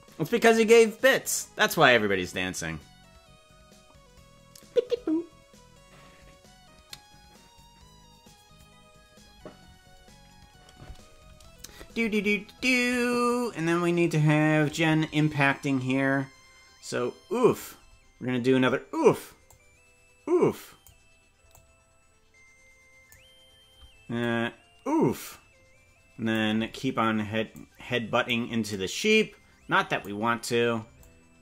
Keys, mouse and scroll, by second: 13.3-17.6 drag, 19.4-20.9 drag, 21.5-23.1 drag, 24.2-26.4 drag, 27.5 click, 28.7-30.0 drag, 31.0-31.4 drag.